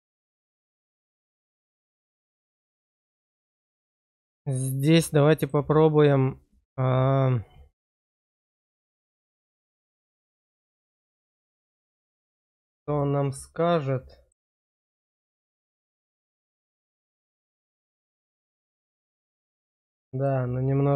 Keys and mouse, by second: 3.1 click, 4.5 shift+click, 5.3 click, 8.2 click, 10.0 click, 13.0-14.3 middle drag, 14.7 middle click, 16.1-18.2 middle drag, 18.8 shift+middle click, 20.3-20.9 middle drag.